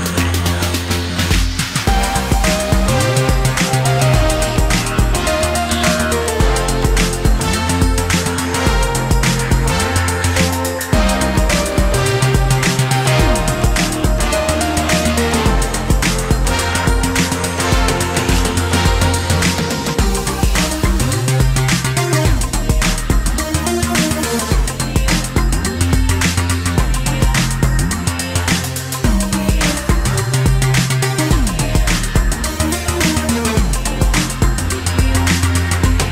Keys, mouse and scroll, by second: 5.1 alt+f, 14.2 shift+click, 18.7 space, 24.2 ctrl+click, 29.0 space, 31.9 space.